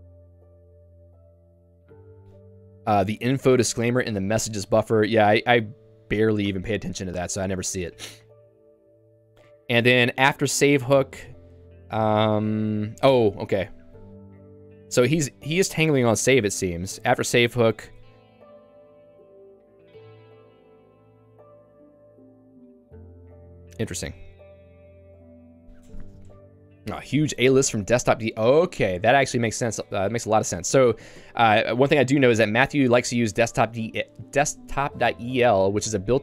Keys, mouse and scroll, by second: 1.3 click, 4.7 j, 6.5 q, 7.1 j, 9.8 k, 11.8 l, 12.2 l, 13.0 j, 14.0 k, 15.1 h, 16.0 h, 16.6 shift+v, 17.3 j, 24.4 Escape, 25.0 j, 29.8 Escape, 30.1 k.